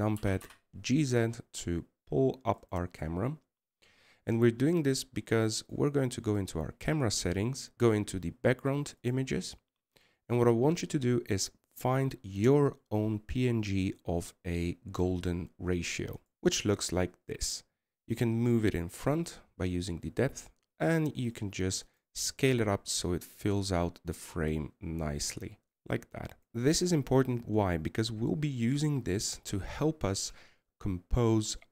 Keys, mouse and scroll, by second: 2.0 g, 5.0-6.2 scroll down 2, 7.4 click, 17.6-20.4 scroll up 1, 27.6 scroll up 2.